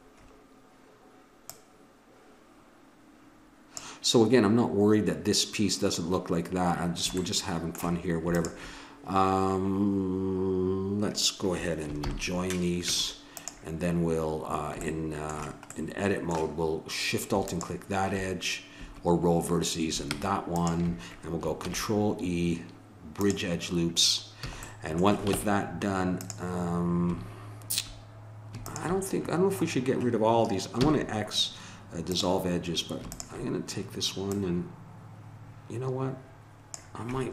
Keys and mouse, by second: 1.5-3.1 drag, 7.2-8.3 middle drag, 8.3-10.5 drag, 12.0 ctrl+j, 12.9 Tab, 17.4-19.3 drag, 20.5-22.4 drag, 21.6 ctrl+e, 24.5 a, 25.3 ctrl+Tab, 28.6-30.4 drag, 30.4-31.8 middle drag, 30.9 x, 33.1-36.2 drag.